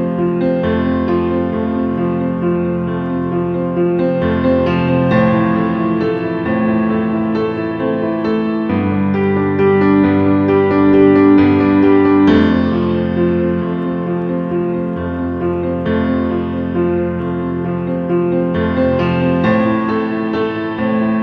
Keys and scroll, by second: 5.0 ctrl+a, 15.5 ctrl+q.